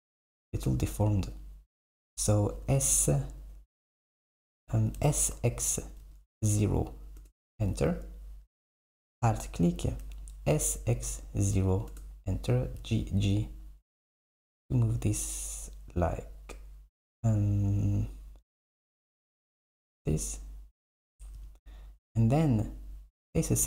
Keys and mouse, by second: 2.7 s, 5.0 s, 8.6 click, 9.3 alt+click, 10.6 s, 12.8 g, 22.6-23.6 drag.